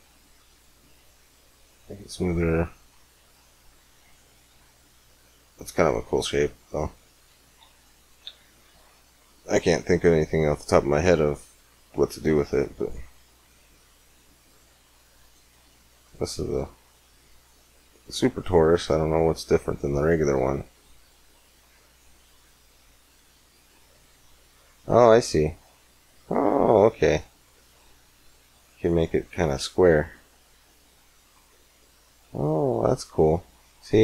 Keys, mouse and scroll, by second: 2.7-4.5 drag, 4.5-5.9 middle drag, 7.5 x, 8.1 shift+a, 13.2 middle click, 14.4-18.7 drag, 19.2-21.9 drag, 21.9-22.9 middle drag, 22.9-24.8 drag, 29.3-31.3 drag, 32.8-34.0 middle drag.